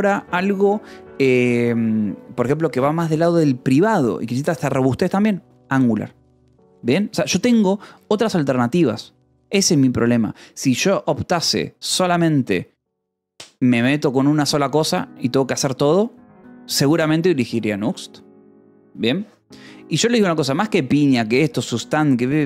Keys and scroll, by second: 8.9 k, 9.6 j.